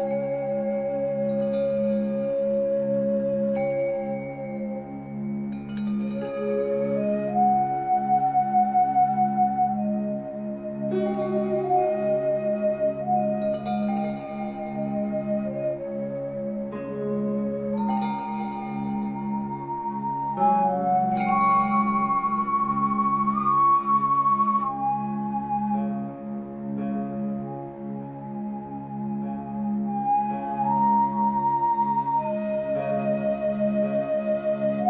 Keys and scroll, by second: 22.2 Caps_Lock.